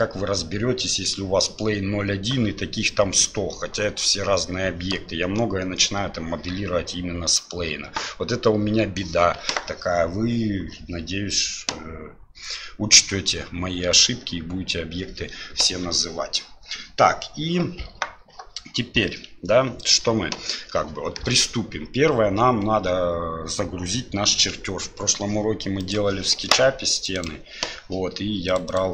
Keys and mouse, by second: 20.0 KP_7.